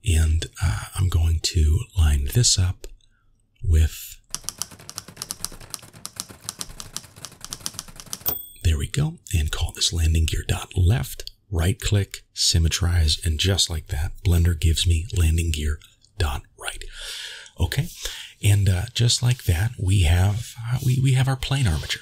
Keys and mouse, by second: 0.8 g, 3.5-8.3 drag, 10.0 middle click, 11.6 right click, 13.0 middle click, 14.9-15.9 middle drag, 16.4-17.3 middle drag.